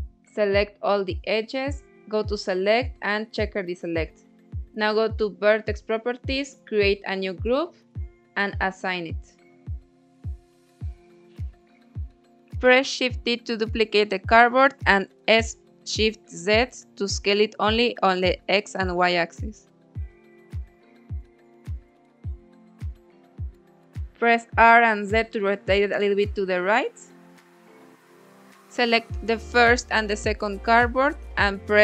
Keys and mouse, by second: 0.7-2.0 drag, 3.5 click, 4.6 click, 5.6 click, 5.8-8.4 drag, 8.9 click, 10.1 middle click, 10.4 click, 11.6 Tab, 12.1 click, 14.1 shift+d, 15.8 s, 16.5 shift+z, 21.3 click, 23.4-24.1 typing, 25.5 click, 25.9 Tab, 26.8 Tab, 27.6 shift+click, 28.9 ctrl+j, 29.8 Tab, 30.5-31.8 drag.